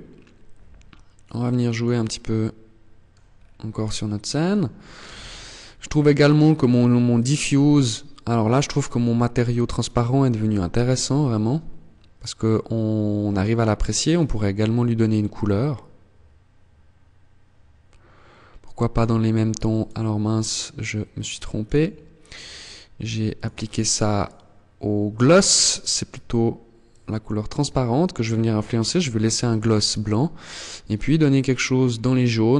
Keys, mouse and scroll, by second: 0.4 middle click, 2.5-3.0 scroll up 3, 3.0 shift+middle click, 3.9 scroll up 1, 9.5 KP_0, 12.7 click, 20.5 click, 24.7 click.